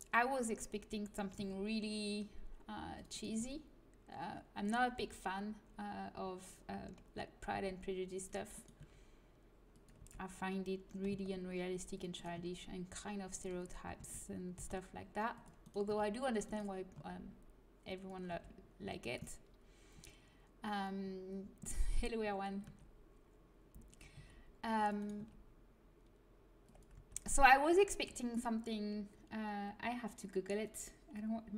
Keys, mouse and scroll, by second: 1.4 c, 3.3 g, 5.0 a, 7.4 c, 8.7 g, 9.9 a, 12.3 g, 13.9 a, 14.5 c, 15.8 r, 16.9 g, 18.2 a, 22.6 g, 24.1 c, 25.1 g, 26.9 a.